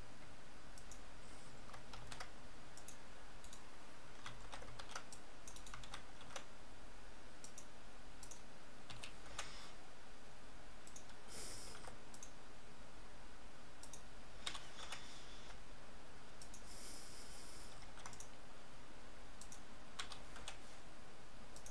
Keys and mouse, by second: 2.0 ctrl+r, 4.4 ctrl+z, 4.8 ctrl+r, 5.8 ctrl+z, 6.2 ctrl+r, 8.9 s, 11.7 ctrl+r, 14.5 s, 17.9 ctrl+r, 20.1 s.